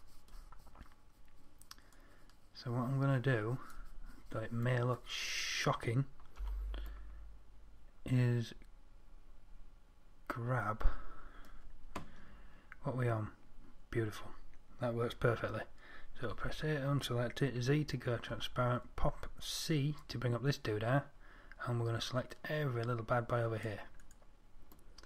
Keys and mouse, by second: 6.7 Tab, 16.7 a, 17.9 z, 18.6 c, 24.5-25.0 drag.